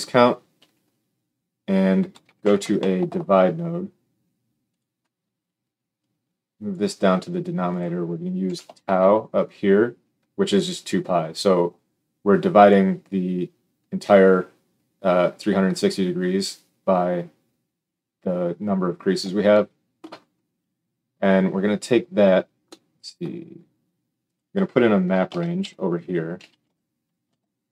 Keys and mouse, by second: 4.8-5.9 middle drag, 5.9-24.3 drag, 24.3-27.7 middle drag, 25.2 shift+a.